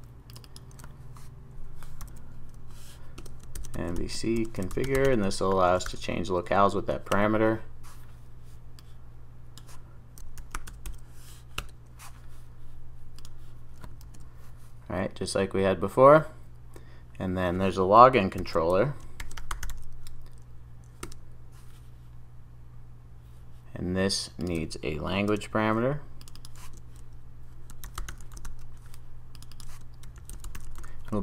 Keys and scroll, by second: 11.7 Return, 14.0 super+s, 18.5 ctrl+shift+super+o, 25.3 super+d.